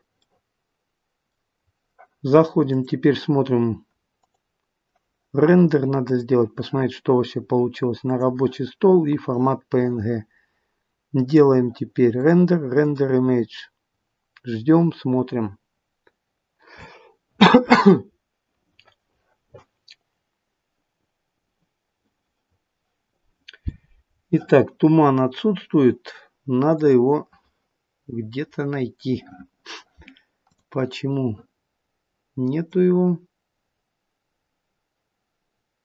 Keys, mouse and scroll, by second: 30.7 click, 30.7-31.4 scroll down 6, 32.5 click.